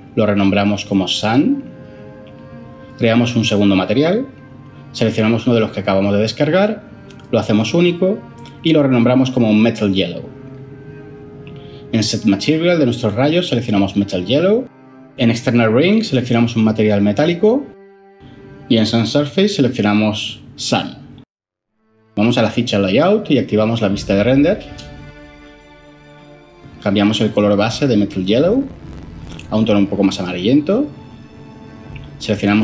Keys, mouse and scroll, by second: 1.2-1.6 typing, 2.4 Return, 5.0-5.7 typing, 5.9 Return, 8.2-10.7 typing, 11.1 Return, 12.9-13.2 typing, 13.5 Down, 13.7 Return, 16.3-16.6 typing, 16.9-17.4 scroll down 2, 17.6 Return, 19.6 typing, 20.0 Down, 20.9 Return.